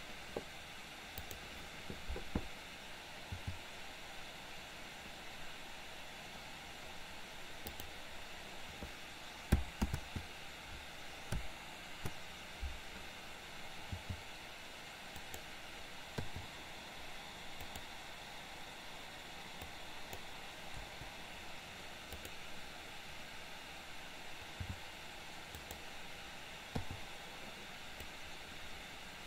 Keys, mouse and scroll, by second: 1.2 click, 3.5 click, 7.8 click, 10.0 ctrl+z, 14.0 g, 16.2 i, 17.8 click, 19.8 click, 20.8 Delete, 22.2 click, 24.6 g, 26.8 i, 28.2-29.2 drag.